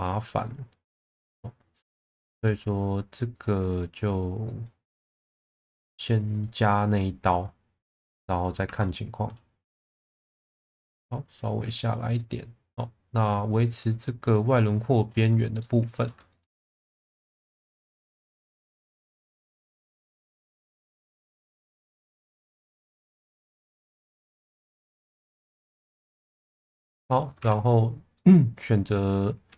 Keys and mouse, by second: 0.4 click, 2.1 shift+middle click, 2.6 click, 3.3 click, 5.4 shift+middle click, 8.6 2, 8.7 click, 10.5 click, 11.9 click, 13.8-14.9 middle drag, 15.6 alt+middle click, 16.3 shift+middle drag, 16.8 1, 17.1 click, 19.6 click, 20.1 click, 21.4 click, 22.2 ctrl+z, 22.5 click, 24.3 click, 26.1-26.6 middle drag, 26.8 shift+middle drag, 27.3 2, 27.7 click, 28.1 middle click.